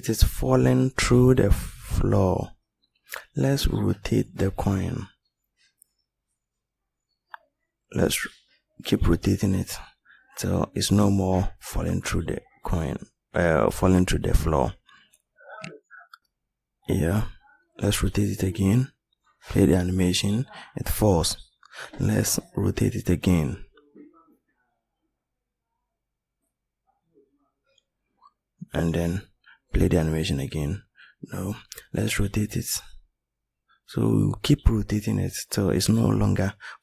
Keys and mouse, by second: 8.7 r, 16.0 r, 26.4 r, 32.7 r.